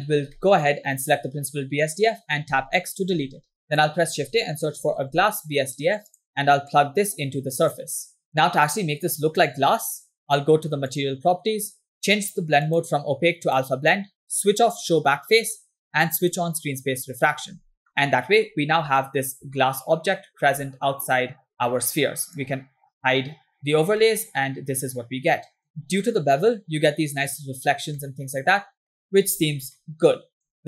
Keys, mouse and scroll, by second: 0.1 scroll down 2, 0.4 middle click, 1.0 click, 2.9 x, 3.3 shift+a, 6.7-8.0 drag, 11.1 click, 11.8 scroll down 2, 12.7-13.9 drag, 14.9 click, 16.4 click, 18.0 middle click, 18.5 scroll up 2, 19.4 scroll down 1, 19.9-20.7 shift+middle drag, 22.4 click, 24.2-25.9 middle drag, 25.8 scroll down 1, 26.1-26.5 scroll up 2, 26.7-27.5 scroll down 1, 28.1-29.0 middle drag, 29.0-29.7 scroll down 3, 30.0-30.6 middle drag.